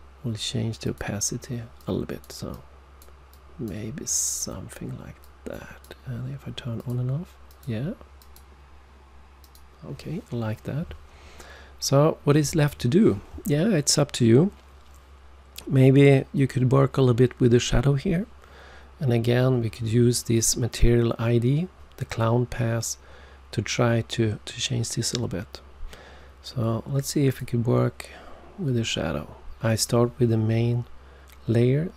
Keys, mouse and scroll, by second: 0.8 click, 1.7 click, 2.4 click, 3.2 click, 5.1 click, 6.7 click, 7.4 click, 8.1 click, 9.4 click, 27.2 click, 29.8 click.